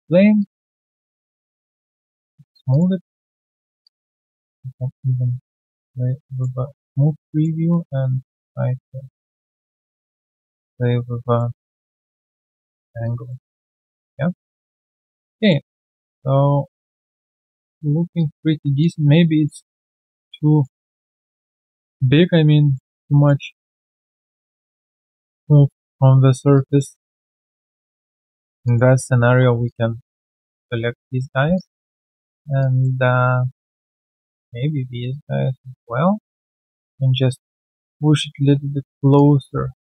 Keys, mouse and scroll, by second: 1.0 alt+click, 1.6 3, 2.1 right click, 2.6 alt+click, 2.9 alt+double click, 3.8 alt+click, 4.8 double click, 5.2 right click, 6.3 double click, 6.5 typing, 6.7 alt+click, 11.5 typing, 13.0 alt+click, 13.4 alt+q, 13.5 right click, 14.1 scroll down 1, 14.4 alt+click, 15.3 alt+click, 15.6 alt+middle click, 15.9 alt+click, 17.8 alt+right click, 18.1 alt+click, 20.0 alt+click, 20.4 alt+double click, 20.8 alt+middle click, 21.2 alt+click, 22.7 alt+middle click, 23.0 alt+click, 23.9 alt+middle click, 24.1 alt+click, 26.1 alt+right click, 26.5 alt+click, 27.3 right click, 28.6 alt+click, 30.2 Tab, 31.5 alt+click, 32.5 alt+click, 34.5 Tab, 35.7 alt+click, 36.4 w, 39.1 alt+click, 39.7 alt+right click.